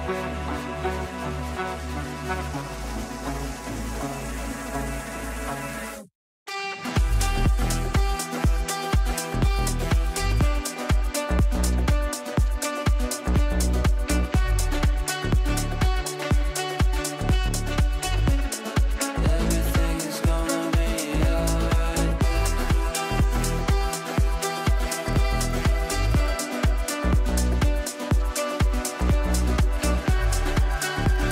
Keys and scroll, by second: 27.9 ctrl+z.